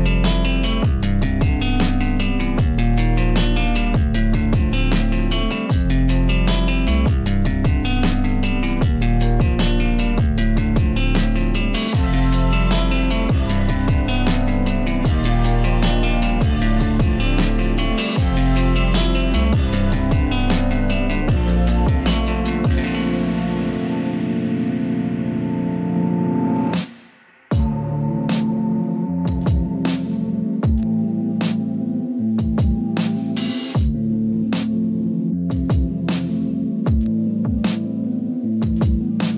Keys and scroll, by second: 29.2-30.0 typing.